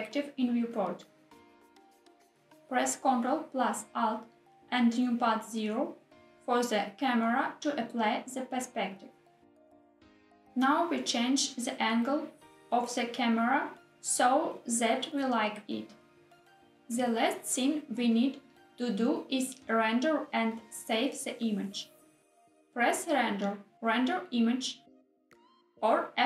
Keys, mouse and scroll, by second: 0.9 middle click, 1.3 middle click, 2.0 click, 9.7 ctrl+alt+KP_0, 10.5 g, 10.9 x, 12.9 g, 13.3 z, 16.7 click, 23.2-26.2 drag.